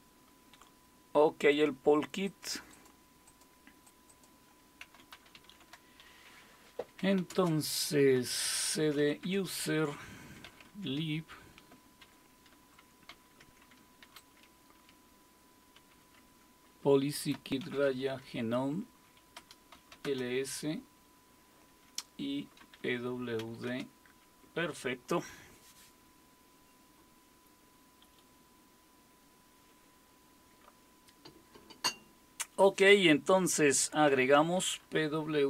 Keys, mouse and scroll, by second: 1.5-3.9 drag, 3.9 Up, 3.9-8.9 Down, 4.1-5.1 drag, 4.6-10.7 typing, 11.8-13.9 typing, 15.7-16.2 typing, 17.3-17.8 typing, 19.1-20.4 typing, 22.3-23.6 typing, 24.8-25.6 typing, 34.5-35.4 typing.